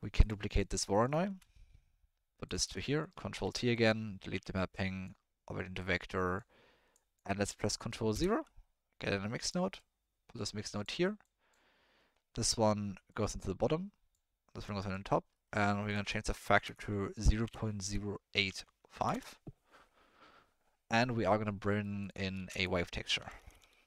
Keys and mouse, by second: 0.5-1.0 drag, 1.2 shift+d, 3.0 click, 3.3 ctrl+t, 4.3 Delete, 4.7 click, 6.0 click, 6.9 click, 7.5 click, 8.1 ctrl+KP_0, 9.4 click, 9.8-10.8 drag, 11.2 click, 13.1-14.1 drag, 14.6 click, 15.3 middle click, 15.9-19.1 drag, 21.8 middle click, 22.0 click, 22.3 shift+a.